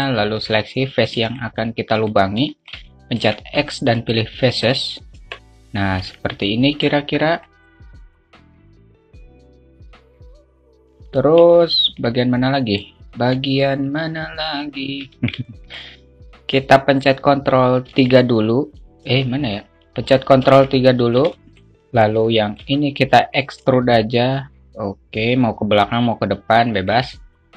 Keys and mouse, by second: 1.8 shift+click, 3.0 alt+shift+middle click, 3.8 x, 5.6 Tab, 6.4 alt+z, 6.9 middle click, 7.3 middle click, 7.7 alt+middle click, 7.9 alt+shift+middle click, 8.6 alt+shift+middle click, 8.8 Tab, 9.1 alt+z, 9.1 1, 9.6 click, 10.6 alt+shift+middle click, 12.9 alt+middle click, 15.5 a, 15.9 alt+middle click, 18.5 ctrl+3, 20.1 Tab, 20.9 ctrl+3, 21.6 Tab, 21.6 `, 22.0 alt+middle click, 22.8 middle click, 24.3 e.